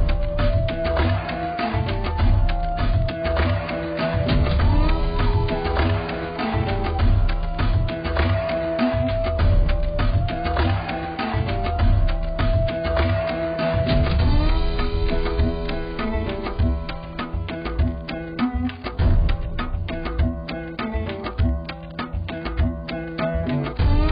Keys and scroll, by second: 1.5 ctrl+0, 3.5 ctrl+0.